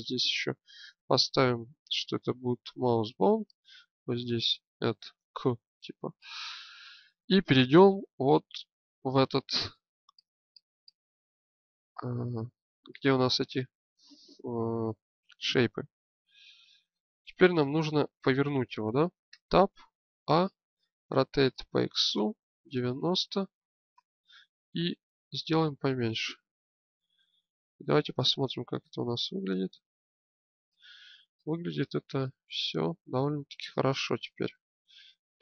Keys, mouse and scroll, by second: 6.2-7.8 alt+drag, 9.0 click, 17.4-19.3 drag, 19.3 Tab, 20.2 a, 21.1 r, 25.0 s, 28.0 Tab, 29.4 click.